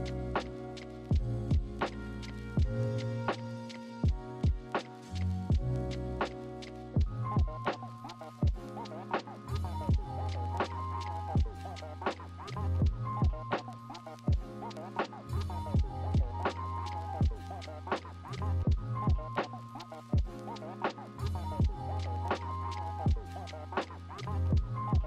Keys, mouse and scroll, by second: 8.1 ctrl+z, 12.7 right click, 13.3 ctrl+z, 18.2 ctrl+-, 18.8 ctrl+=, 19.8 ctrl+shift+n, 23.1 ctrl+z, 24.6 right click.